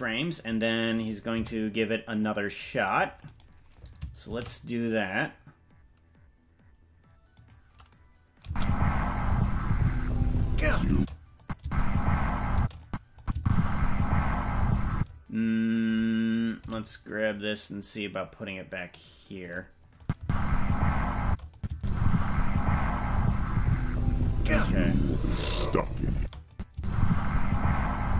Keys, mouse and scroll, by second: 0.9 right click, 1.3 c, 4.3 shift+d, 8.4 space, 10.9 space, 11.4 click, 11.6 space, 12.5 space, 12.8 click, 13.2 click, 13.4 space, 14.9 space, 15.7 right click, 16.6 g, 20.0 click, 20.1 space, 21.2 space, 21.5 click, 21.7 space, 24.8 scroll up 3, 25.4-25.9 scroll up 1, 26.1 space, 26.5 click, 26.7 space.